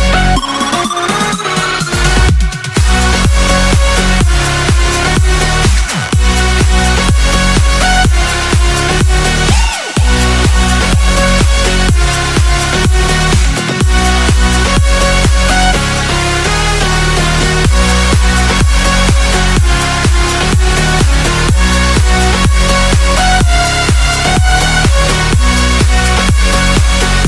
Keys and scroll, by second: 0.1 space, 0.5 ctrl+z, 1.5 ctrl+z, 1.6 x, 2.3 space, 3.4 x, 4.3 5, 5.5 space, 6.2 space, 7.5 r, 8.9 x, 11.3 space, 12.8 space, 17.3 space, 22.2 z, 22.9 x, 26.7 x.